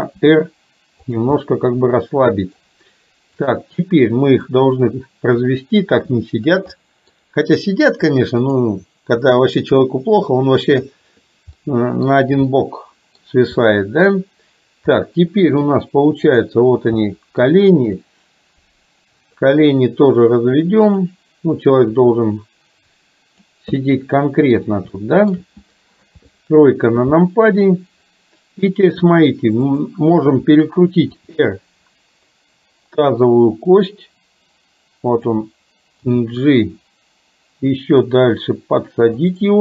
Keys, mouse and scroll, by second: 0.2 r, 1.3-2.6 middle drag, 3.5 click, 4.5-5.6 drag, 6.8-7.2 middle drag, 8.5 click, 9.7-11.1 drag, 11.7 middle click, 12.6-13.1 scroll up 1, 13.1 middle click, 13.7-14.1 middle drag, 15.1-15.7 middle drag, 15.7-16.3 scroll down 1, 16.3 click, 17.1-17.5 middle drag, 18.1-19.5 drag, 20.8 click, 22.1-23.7 drag, 24.0 middle click, 25.1 shift+middle click, 26.1 KP_3, 29.7 click, 31.2 r, 36.1 g.